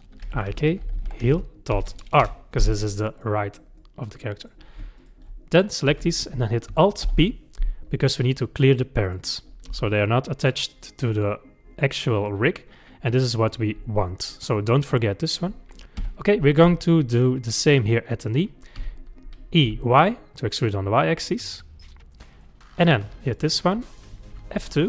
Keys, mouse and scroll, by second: 1.0 e, 2.8-5.0 middle drag, 5.0 shift+click, 7.0 alt+p, 9.7 g, 12.1-15.1 middle drag, 16.0 KP_3, 17.4 click, 18.8 e, 22.3 click, 23.0-24.3 middle drag, 24.3 F2.